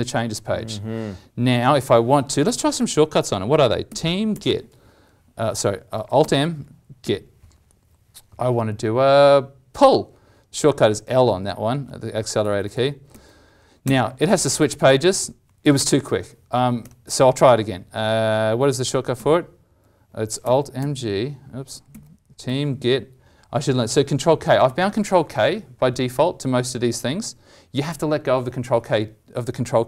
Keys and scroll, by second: 3.8 ctrl+m, 6.1 alt+m, 19.1 ctrl+m, 20.4 alt+m, 21.9 alt+m.